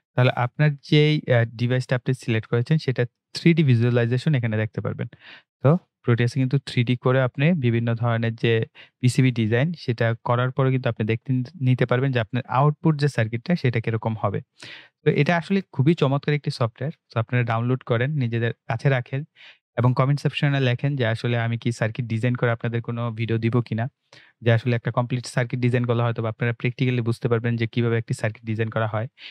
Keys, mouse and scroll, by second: 4.0 right click, 4.9-5.3 scroll down 1, 5.7-8.3 drag, 8.3-8.7 scroll down 1, 9.1-13.7 drag, 13.7-15.5 scroll down 1, 16.2 right click, 20.9 click.